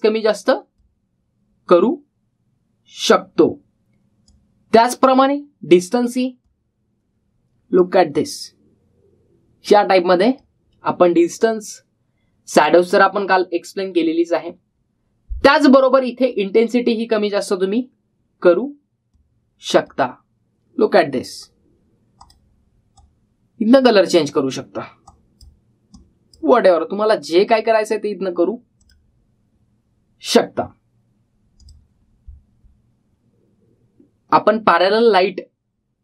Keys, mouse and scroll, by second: 5.1-6.0 drag, 17.4-18.0 click, 32.4 click.